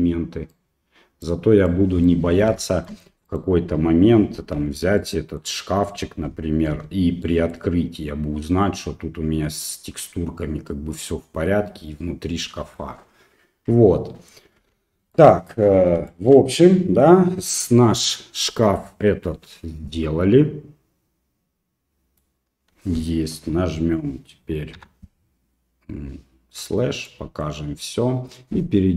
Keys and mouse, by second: 0.5 right click, 1.7 middle click, 2.7 shift+middle click, 3.3 right click, 4.6 l, 5.0 middle click, 6.7 h, 7.3 middle click, 9.7-12.8 middle drag, 14.6 alt+h, 15.2 middle click, 16.1 shift+middle click, 16.5 middle click, 20.0-22.2 middle drag, 25.6 KP_Divide, 27.1 middle click.